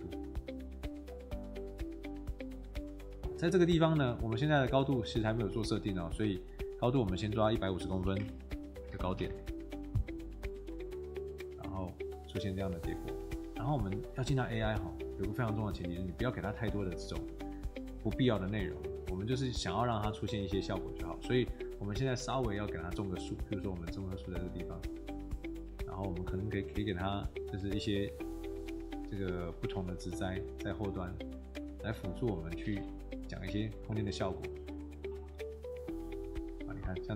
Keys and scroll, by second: 2.7 Escape, 7.7-9.4 typing, 33.7 Escape, 35.2 Escape.